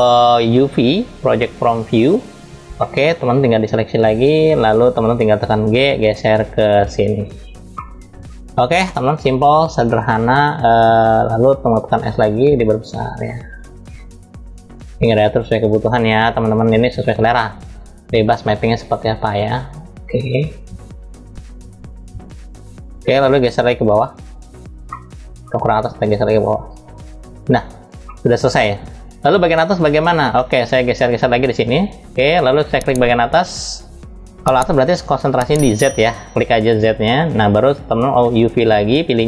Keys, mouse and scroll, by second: 1.4-2.4 drag, 2.4 middle click, 2.7-3.1 scroll down 1, 3.4-4.3 drag, 5.1 g, 7.3 middle click, 7.9 scroll up 1, 8.5 middle click, 8.9 scroll up 1, 11.6 s, 15.0-22.9 drag, 23.6 click, 24.6-25.7 middle drag, 25.7-26.7 drag, 27.8 middle click, 28.2-28.9 scroll down 2, 28.9 middle click, 30.0 middle click, 32.6 click, 36.6 click.